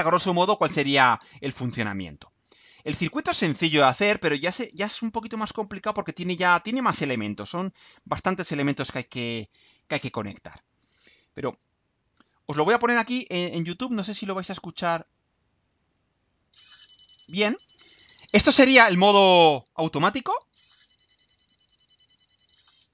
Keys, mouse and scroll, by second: 10.7 click, 13.7 click, 14.4-17.9 drag.